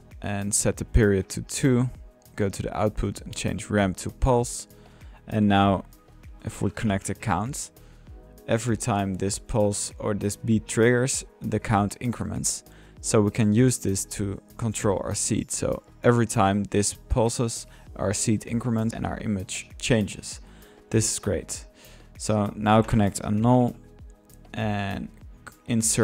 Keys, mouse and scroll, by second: 0.7-1.2 drag, 2.1 drag, 3.0 click, 3.7 click, 4.9-5.7 drag, 6.4-7.6 typing, 8.2-9.3 drag, 9.3-11.4 middle drag, 11.9 click, 12.2 click, 12.3 middle click, 12.9 drag, 13.4 drag, 14.6 click, 14.8 click, 15.7 click, 18.8 click, 19.1-19.5 middle drag, 20.9-21.3 drag, 22.0-23.1 drag, 23.1-24.0 drag, 23.8-24.5 typing, 24.2-24.9 drag, 25.1 click, 25.9-26.0 drag.